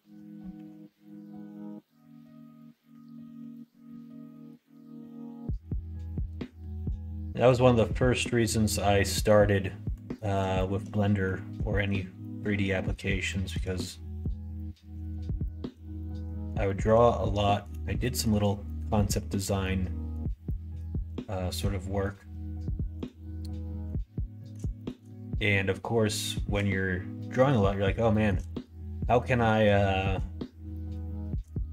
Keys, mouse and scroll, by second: 0.0 ctrl+z, 0.5 1, 0.9 click, 1.4 middle click, 1.5 g, 3.3 ctrl+z, 3.6 middle click, 4.6 click, 5.0 b, 6.5 g, 7.6 middle click, 8.9 scroll up 1, 8.9 middle click, 10.5 shift+middle click, 10.9 scroll up 1, 11.0 middle click, 11.7 shift+middle click, 12.1 middle click, 12.7 middle click, 13.2 shift+middle click, 13.8 middle click, 14.5 middle click, 15.4 shift+middle click, 16.0 middle click, 16.6 shift+middle click, 17.1 scroll up 1, 17.2 middle click, 17.6 scroll down 1, 18.0 scroll up 1, 18.0 shift+middle click, 18.2-18.6 scroll down 1, 18.6 scroll up 1, 18.6 middle click, 18.9 scroll down 1, 19.6 middle click, 20.4 middle click, 21.6 shift+middle click, 22.9 click, 23.6 middle click, 24.3 middle click, 24.7 shift+middle click, 27.1 middle click, 28.0 shift+middle click, 28.5 middle click, 29.3 middle click, 30.7 middle click, 31.4 middle click.